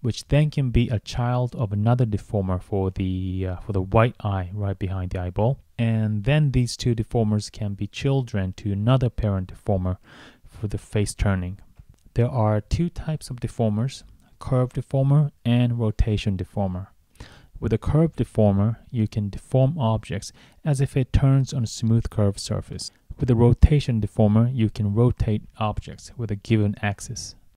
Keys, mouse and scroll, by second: 0.4 click, 2.9 click, 3.7 click, 5.2 right click, 6.2 click, 7.2 click, 8.0 right click, 9.6 click, 10.5 click, 12.1 click, 13.7 click.